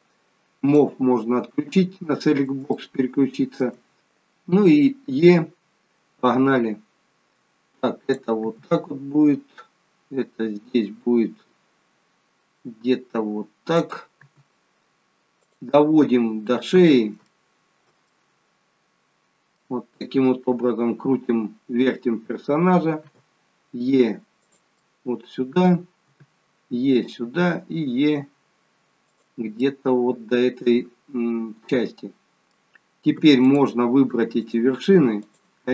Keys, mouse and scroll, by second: 0.6 click, 2.7 shift+middle click, 16.2-16.9 scroll up 2, 17.3 shift+middle click, 17.3-18.4 shift+scroll up 1, 18.4 middle click, 24.8 middle click, 26.0 e, 29.7 middle click, 33.4 click, 34.5 shift+click.